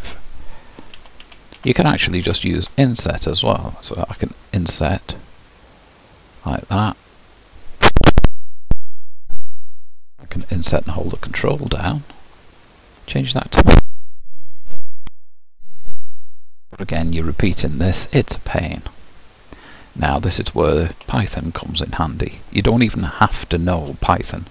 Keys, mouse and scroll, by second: 1.0 ctrl+z, 1.2 ctrl+z, 1.6 ctrl+z, 2.2 ctrl+z, 4.2 i, 7.6-10.4 drag, 10.4 typing, 13.0-16.0 drag, 18.3-21.1 drag, 21.1-24.5 shift+middle drag.